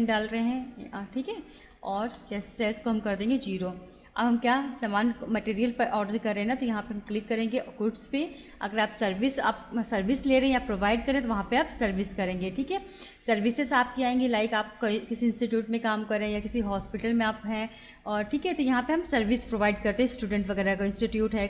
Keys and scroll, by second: 1.5 Return, 4.7 Up, 6.9 Return.